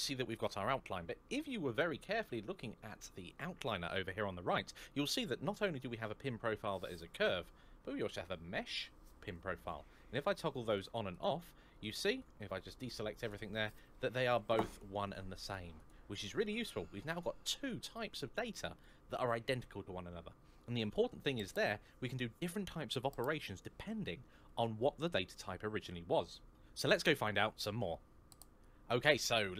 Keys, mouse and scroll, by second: 28.0 click.